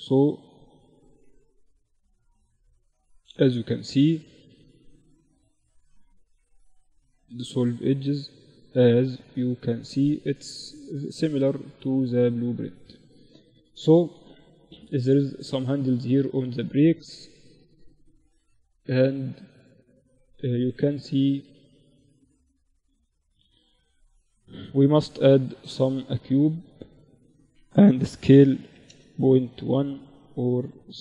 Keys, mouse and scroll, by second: 0.5 ctrl+r, 2.9 ctrl+r, 5.0 x, 8.4 Tab, 9.0-12.5 middle drag, 12.5 KP_1, 13.3-22.2 middle drag, 22.2 KP_7, 23.2 shift+a, 27.1 s, 29.2 s, 30.5-31.0 drag.